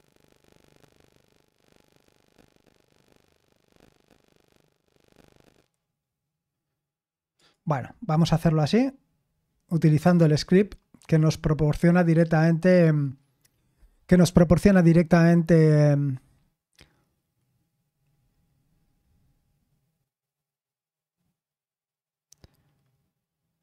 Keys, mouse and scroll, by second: 7.3 click, 10.0 Return.